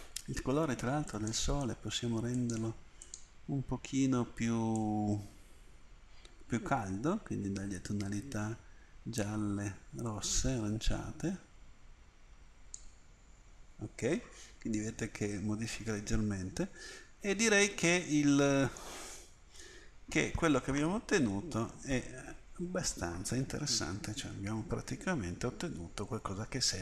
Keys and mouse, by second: 4.2 click, 17.2 middle click, 18.1 click, 18.4 middle click.